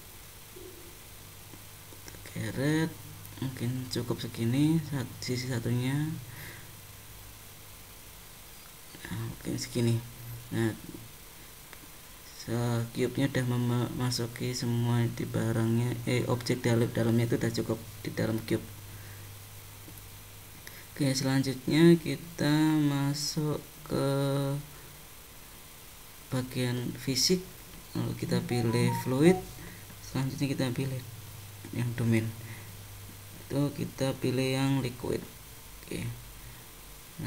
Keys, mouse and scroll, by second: 1.6 g, 4.4 click, 6.1 g, 9.4 middle click, 12.4 click, 14.8 Tab, 15.6 click, 16.4 scroll down 2, 18.6 click, 19.4 click, 21.8 click, 22.6-24.4 scroll down 6, 25.5 click, 28.8 click, 30.1 click, 33.6 click, 35.4-36.6 scroll down 4, 36.6-37.2 scroll down 3.